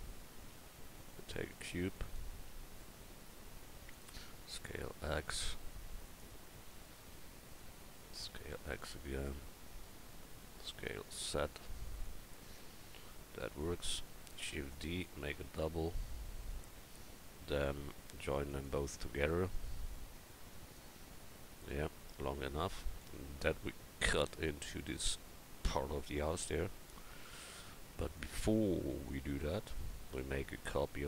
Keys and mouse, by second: 0.5 s, 2.5 s, 4.3 s, 8.0 s, 10.6 s, 14.4 shift+d, 19.7-22.1 drag, 26.6 KP_1.